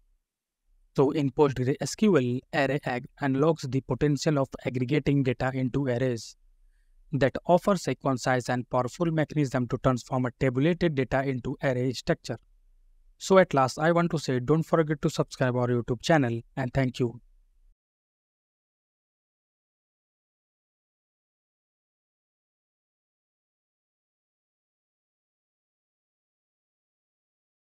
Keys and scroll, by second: 0.0 F9.